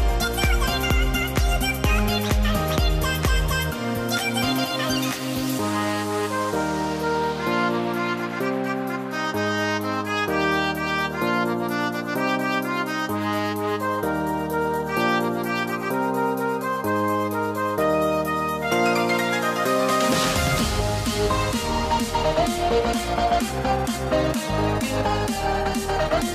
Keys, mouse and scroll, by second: 1.2 alt+click, 1.6 alt+click, 2.4-4.5 drag, 5.6-9.0 alt+drag, 9.4-10.6 drag, 10.8 z, 11.0 click, 12.8 Delete, 13.1 click, 13.4-15.3 typing, 15.1 click, 16.4 shift+click, 16.6 click, 17.5 shift+click, 17.7-22.4 drag.